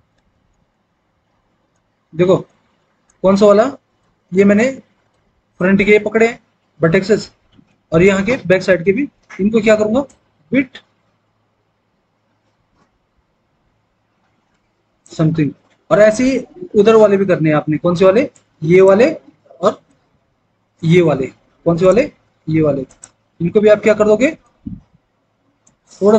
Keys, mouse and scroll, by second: 0.0 alt+w.